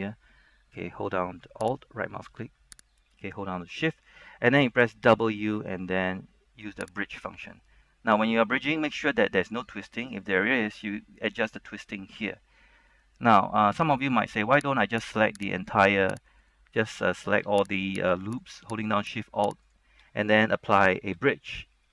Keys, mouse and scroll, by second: 1.8 alt+right click, 3.1 alt+shift+right click, 5.3 w, 7.0 click, 7.6 middle click, 8.5 middle click, 8.9 scroll up 1, 12.5 scroll down 1, 13.0 middle click, 13.5 scroll up 1, 13.9 shift+middle click, 15.7 alt+right click, 16.5 shift+right click, 17.9 alt+right click, 18.5 alt+shift+right click, 21.2 w.